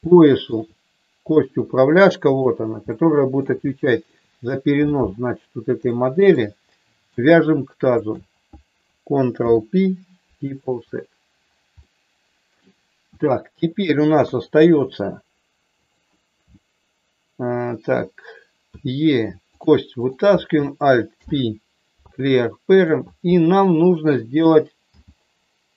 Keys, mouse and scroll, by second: 0.0 shift+middle click, 1.3 middle click, 2.3 click, 2.9 middle click, 3.6 shift+middle click, 5.9 shift+middle click, 6.7 middle click, 8.0 shift+click, 9.3 ctrl+p, 11.7 middle click, 13.1 shift+middle click, 14.3 KP_3, 15.8 click, 18.8 e, 19.4 click, 20.0 click, 21.1 alt+p, 24.9 g.